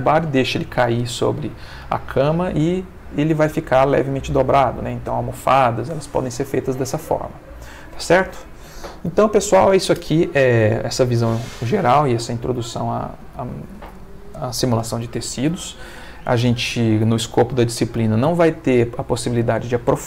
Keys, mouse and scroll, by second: 6.1-7.2 middle drag, 7.4 ctrl+middle click.